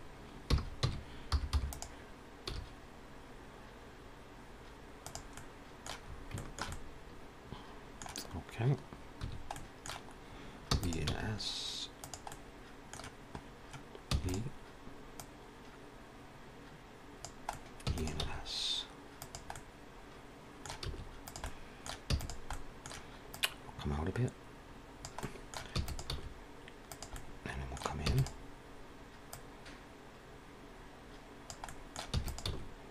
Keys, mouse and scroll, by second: 0.7 r, 2.9 s, 5.2 middle click, 5.9-6.5 scroll up 3, 6.2 shift+middle click, 6.6 middle click, 9.1 1, 9.4 middle click, 10.6 e, 10.9 s, 12.2 middle click, 13.4 scroll down 1, 14.0 e, 15.1 click, 17.4 middle click, 17.8 e, 18.2 s, 19.4 middle click, 20.7 s, 21.3 middle click, 22.0 e, 22.4 middle click, 23.2 click, 25.1 middle click, 25.6 e, 26.0 s, 27.0 middle click, 27.9 e, 29.3 click, 31.5 middle click, 32.0 e, 32.5 s.